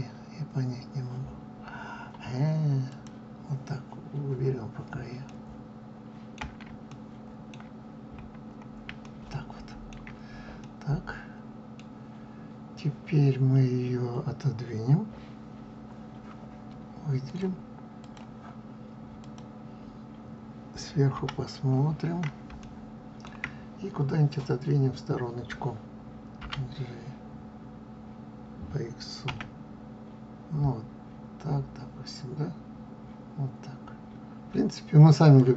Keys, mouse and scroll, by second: 2.8 click, 5.2-7.8 middle drag, 7.8 scroll up 2, 9.0-13.5 shift+middle drag, 17.1-19.3 drag, 21.1 KP_7, 21.9 scroll down 1, 22.5-26.3 shift+middle drag, 26.3 g.